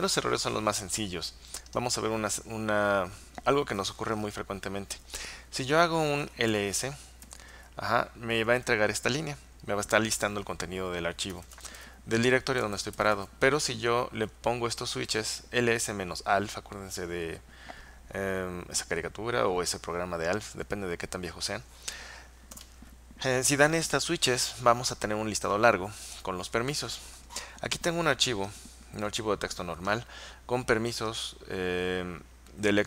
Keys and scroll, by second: 6.3-8.5 typing, 11.3-13.6 typing, 22.6 Return.